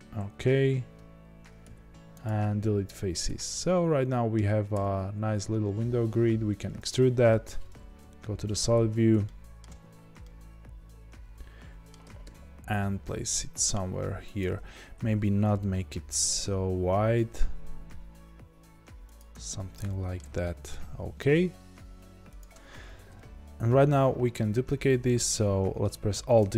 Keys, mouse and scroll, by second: 2.2 x, 3.5-14.5 middle drag, 4.7 e, 7.5-8.7 scroll down 2, 8.7 z, 9.8 Tab, 12.1 g, 14.5 Tab, 15.6 g, 19.3 Tab, 19.8-23.0 middle drag, 20.2 g, 23.0 KP_1, 26.3 alt+d.